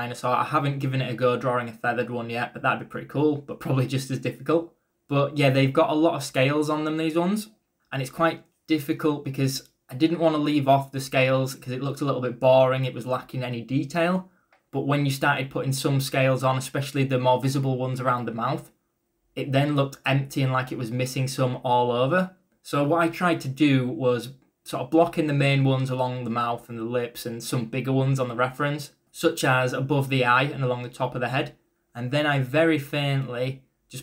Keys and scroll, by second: 6.7 ], 9.4 e, 9.7 b, 11.5-12.4 typing, 12.6 ctrl+z, 17.8 e, 18.7 e, 19.2 b, 20.9-21.8 typing, 24.0-25.3 typing.